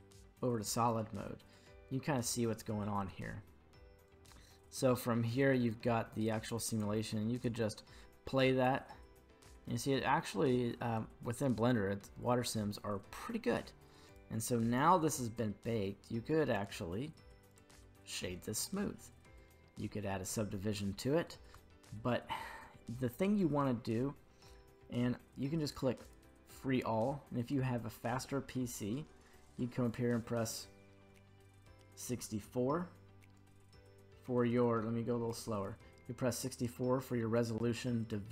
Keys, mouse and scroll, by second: 0.9-2.5 middle drag, 0.9 z, 4.1-6.8 drag, 7.4 click, 9.7-10.7 middle drag, 14.1 click, 16.5 q, 17.9 q, 18.8 middle click, 18.9 middle click, 19.6 scroll up 1, 21.0-21.5 scroll up 1, 21.6-22.6 shift+middle drag, 26.0 click, 27.4-28.9 scroll up 1, 28.9 scroll up 9, 29.9-32.2 drag, 33.0 scroll down 1, 34.4-37.2 scroll down 5, 37.2-38.2 scroll up 5.